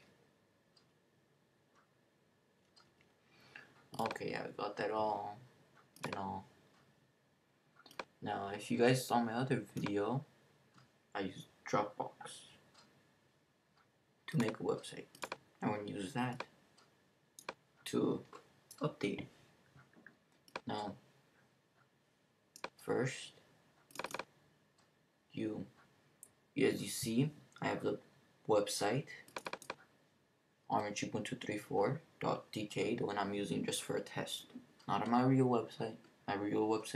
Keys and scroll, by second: 0.0-0.3 typing.